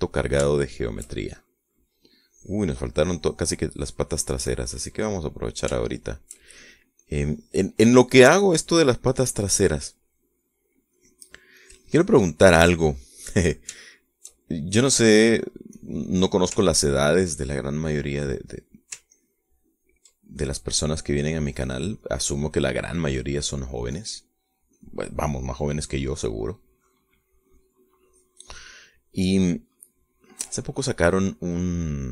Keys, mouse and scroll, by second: 3.3 click, 4.1 click, 4.8 click, 5.6 click, 6.9 shift+middle click, 7.7-9.0 shift+drag, 9.1-10.1 drag, 10.4 click, 11.0-12.0 middle drag, 12.1 click, 12.7 click, 13.9 click, 14.9-16.1 shift+middle drag, 16.9 click, 17.7 ctrl+click, 18.9 middle click, 20.3 ctrl+click, 21.4 ctrl+click, 22.1 middle click, 23.1 middle click, 24.3 middle click, 25.1 click, 26.7 click, 27.8-28.9 drag, 29.2 click, 29.9 middle click, 31.0 click, 31.0 middle click, 31.7-32.1 drag, 31.7-32.1 right drag.